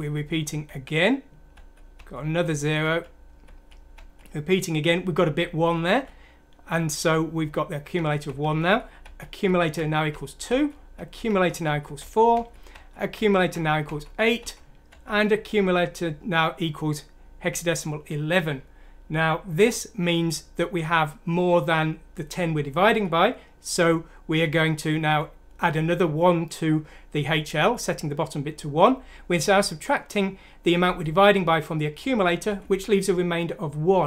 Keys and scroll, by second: 0.5 F7, 1.9 F7, 2.4 F7, 2.8 F7, 3.9 F7, 5.8 F7, 7.9 F7, 8.2 F7, 8.5 F7, 9.0 F7, 9.7 F7, 22.8 F7, 25.0 F7, 32.4 F7.